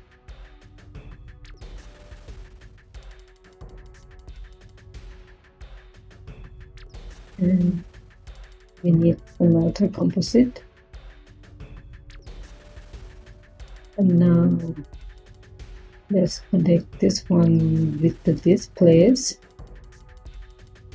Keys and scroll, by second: 8.2 Tab, 8.5-10.2 typing, 17.7 Tab, 17.9-19.8 typing.